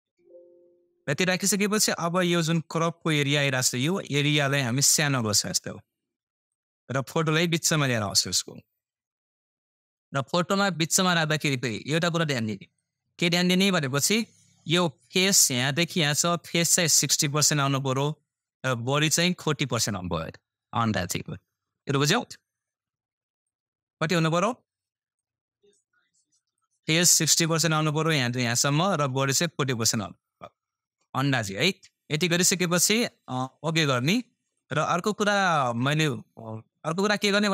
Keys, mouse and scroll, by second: 9.3-32.2 drag.